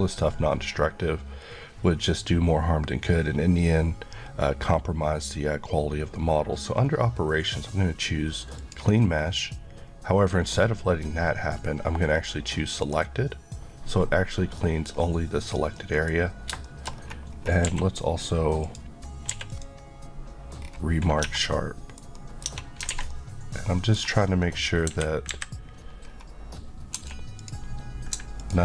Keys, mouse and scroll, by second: 8.6 click, 14.6 middle click, 14.9-15.7 scroll up 1, 15.8 middle click, 16.9-17.3 shift+scroll up 2, 17.7 q, 18.6 click, 19.3 q, 19.5 click, 20.6 scroll, 20.7-21.2 scroll down 1, 21.2 Tab, 21.5 middle click, 22.5 Tab, 23.0 alt+a, 23.1 middle click, 24.9 KP_3, 26.0-27.0 scroll, 27.0 1, 27.4 click.